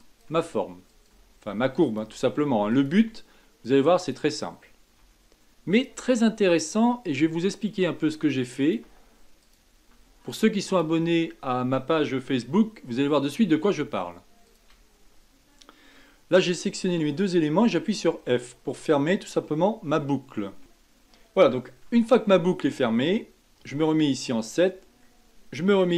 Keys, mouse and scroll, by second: 0.0-2.9 typing, 4.4-5.0 scroll down 3, 5.0 e, 5.9 e, 7.5-8.0 scroll down 3, 8.0 e, 8.8 e, 9.9 e, 11.0-12.4 scroll up 6, 12.4 shift+middle click, 13.1-14.4 scroll up 3, 14.4 shift+click, 17.5 f, 18.6-19.1 scroll down 3, 19.1-20.2 scroll up 2, 20.2-20.6 scroll up 3, 20.6-21.9 scroll down 3, 21.9 Tab, 22.2-23.6 middle drag, 23.6 KP_7, 24.4 scroll down 2, 24.7-25.7 scroll up 4.